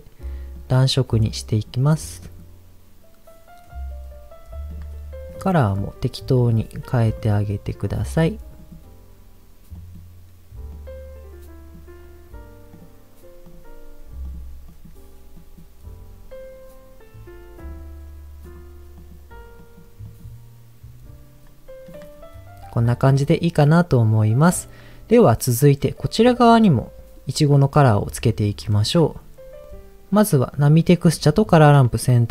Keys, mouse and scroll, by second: 4.6 click, 5.3 click, 6.3 click, 12.7 click, 13.4 click, 17.6 click, 21.8 click, 22.1 scroll down 1, 22.8 scroll down 1, 23.1-24.5 middle drag, 28.6-29.1 scroll down 3, 29.6 click, 29.6 middle click, 29.6 scroll up 3, 30.5 click, 31.3 shift+click, 32.0 middle click.